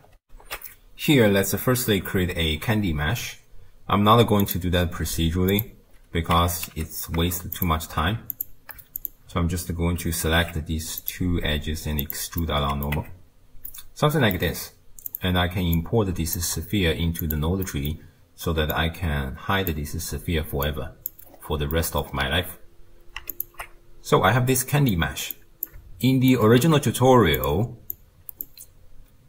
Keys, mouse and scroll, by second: 0.2 ctrl+alt+shift+q, 2.5 shift+a, 5.5 click, 5.9-6.4 scroll up 2, 6.4 Tab, 6.8 3, 7.5 shift+click, 8.3 alt+click, 9.0 alt+shift+click, 10.3 alt+e, 12.4 middle click, 13.0 Tab, 13.2-13.7 scroll down 3, 13.7-15.1 middle drag, 15.1 click, 15.8 click, 17.2 click, 17.7-18.8 middle drag, 18.8 drag, 20.6 click, 21.3-21.8 scroll up 1, 21.8 middle click, 22.1-23.4 scroll up 2, 23.4 alt+shift+click, 24.6-25.4 middle drag, 25.4 click, 26.1 shift+right click, 26.6 g, 27.9 click.